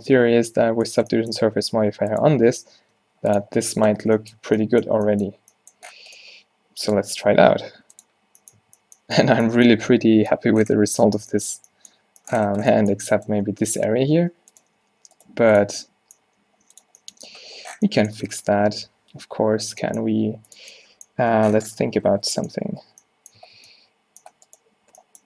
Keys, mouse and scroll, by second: 0.5 z, 1.5 g, 2.6 Tab, 2.9 Tab, 3.1 g, 3.5 z, 4.5 Tab, 8.7 a, 10.9 Tab, 13.4 Tab, 13.8 Tab, 15.4 g, 16.4 g, 20.2 g, 21.4 Tab, 21.9 z, 22.6 a, 22.9 Tab, 23.5 a, 23.7 a.